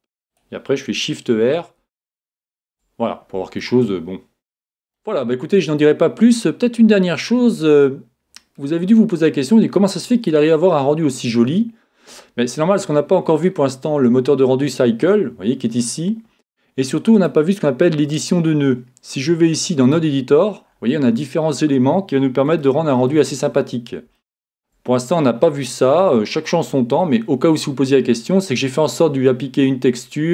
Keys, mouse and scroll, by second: 0.4-2.3 drag, 1.4 shift+r, 1.8 shift+r, 2.2 shift+r, 2.6 shift+r, 3.6 middle click, 4.7 middle click, 5.7-7.5 middle drag, 9.0-10.9 drag, 10.9-13.6 middle drag, 11.7-12.8 scroll down 1, 12.8-13.6 scroll down 1, 17.2-20.7 drag, 20.7-26.1 middle drag, 27.6-30.3 middle drag, 27.6-28.8 scroll up 1, 28.8-29.4 scroll down 1, 29.4 scroll down 1.